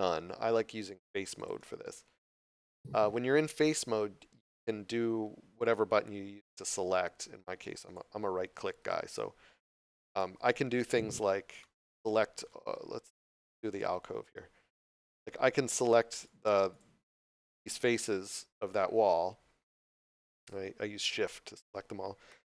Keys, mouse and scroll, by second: 1.4 click, 9.0 shift+right click, 9.6 shift+right click, 10.1 shift+right click, 11.6 middle click, 13.2 scroll down 1, 14.8 shift+middle click, 16.2 right click, 16.7 shift+right click, 17.1 shift+right click, 17.4 shift+right click.